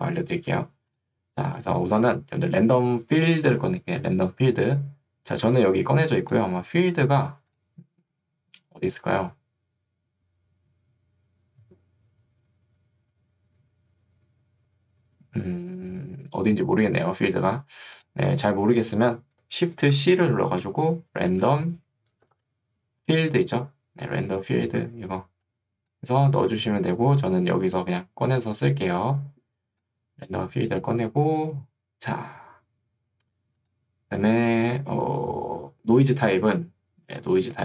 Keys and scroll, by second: 5.6 ctrl+2, 6.6 Escape, 20.9-22.9 typing, 25.0 ctrl+2, 26.6 Escape.